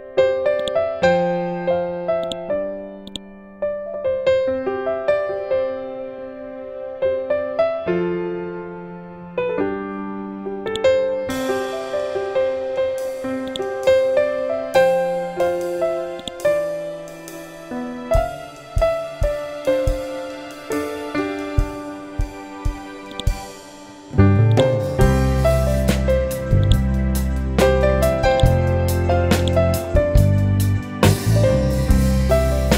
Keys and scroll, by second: 4.5 ctrl+d, 8.1 ctrl+d, 12.3 c, 17.3 F12, 18.3 5, 18.5 Return, 19.6 F12, 20.0 1, 20.2 Return.